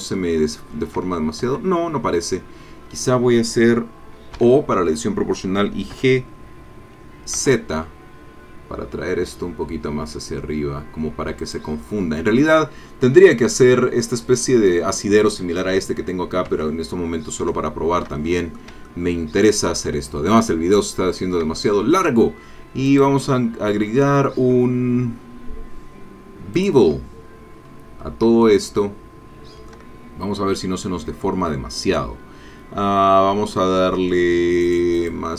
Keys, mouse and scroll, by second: 0.1 shift+middle click, 1.5 Tab, 1.6-3.7 drag, 4.3 o, 5.9 g, 7.3 z, 8.7 scroll down 2, 9.4 scroll down 2, 11.4 click, 16.5 Tab, 17.2 scroll down 2, 17.7-20.9 shift+middle drag, 21.5 shift+middle click, 22.9 click, 26.6 click, 27.6-28.2 scroll up 4, 28.4 shift+click, 29.0 shift+middle click, 31.5-32.1 scroll down 2, 34.6 click, 34.9 click.